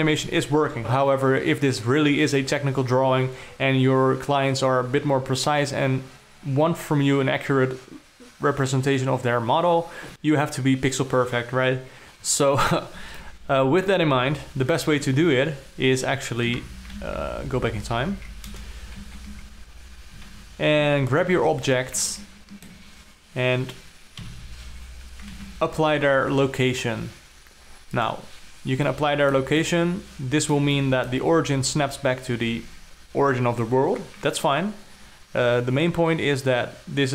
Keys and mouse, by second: 1.6 space, 2.2 ctrl+middle click, 13.7-14.4 alt+middle drag, 15.5 Down, 17.0 Down, 17.6 ctrl+z, 17.7 ctrl+z, 17.9 ctrl+z, 18.1 ctrl+z, 18.3 ctrl+z, 19.0 KP_0, 19.6 ctrl+z, 21.4 alt+a, 22.6-23.2 ctrl+middle drag, 24.7 i, 26.0 ctrl+a, 29.5-29.9 alt+middle drag, 30.2-31.0 ctrl+middle drag, 31.2-31.6 alt+middle drag.